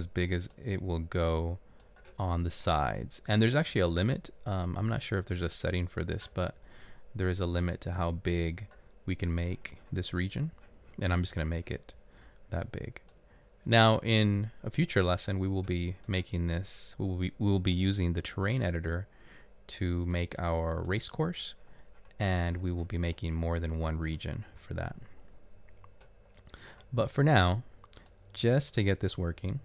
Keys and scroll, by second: 2.2 typing.